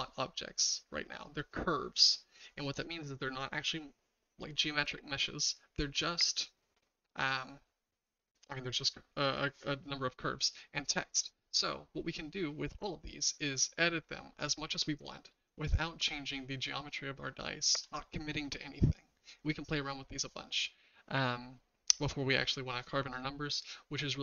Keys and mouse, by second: 11.1 click, 14.8-15.3 middle drag, 15.8-17.8 shift+middle drag.